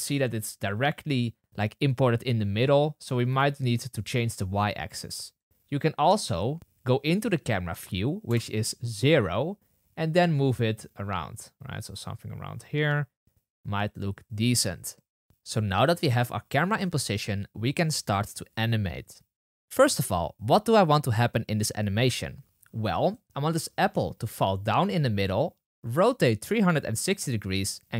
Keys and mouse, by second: 3.3 click, 8.2 KP_0, 14.1-15.2 drag, 15.2-27.9 middle drag, 23.4 g.